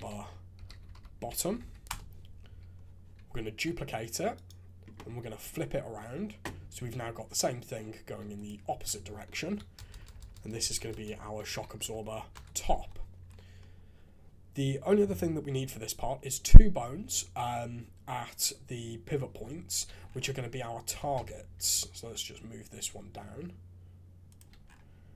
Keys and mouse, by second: 1.4 t, 3.4 shift+d, 5.2 alt+f, 8.3 click, 8.8 F2, 9.9-10.9 typing, 12.7 alt+a, 19.8 shift+a, 20.9 g.